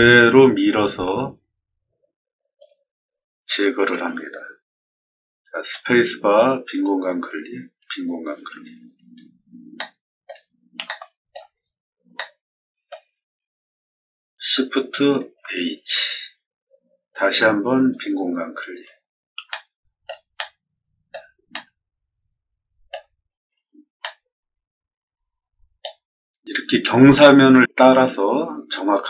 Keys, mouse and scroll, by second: 5.6 space, 6.6 click, 7.7 click, 8.7 scroll down 2, 8.8 middle click, 9.1 middle click, 9.7 middle click, 10.8 shift+middle click, 11.5 scroll down 2, 12.0-12.8 shift+middle drag, 15.1 shift+h, 17.8 click, 19.4 shift+middle click, 20.3 middle click, 21.4-22.8 shift+middle drag, 23.3 middle click, 23.9-25.7 middle drag.